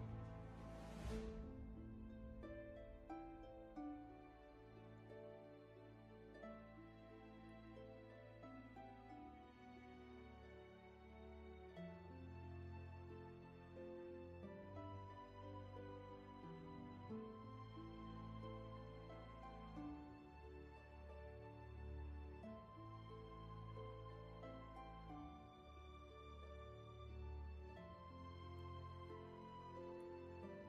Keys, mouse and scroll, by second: 9.2 ctrl+z.